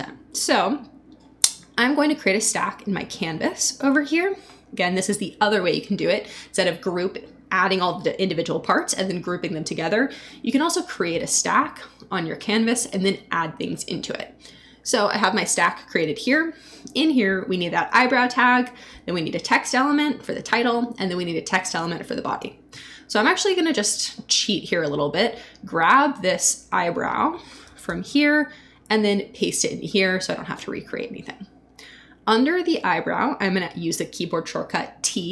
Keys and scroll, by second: 10.4 s, 27.8 super+c, 28.9 super+v.